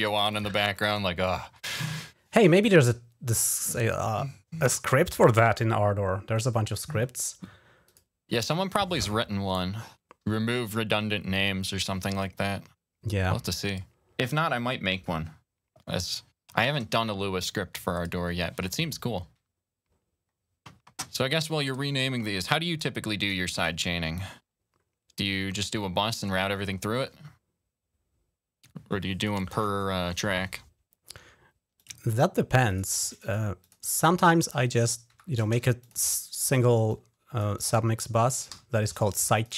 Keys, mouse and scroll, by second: 0.0 click, 0.2 click, 0.6 click, 1.1 click, 1.6 Delete, 1.7 Return, 6.2 right click, 7.7 click, 20.4-20.8 scroll down 4, 21.8 click, 22.6 click, 23.4 click, 29.0 click, 31.6 click, 32.4 click, 32.5 click, 33.0 click, 33.5 click, 34.1 click, 35.0 Delete, 35.4 Return, 35.6-38.5 drag, 38.4 Delete, 38.8 Return, 39.2 click.